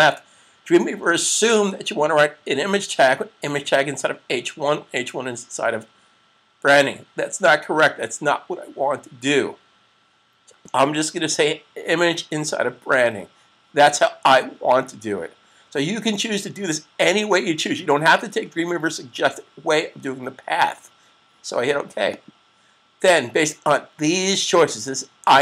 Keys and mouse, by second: 22.0 click.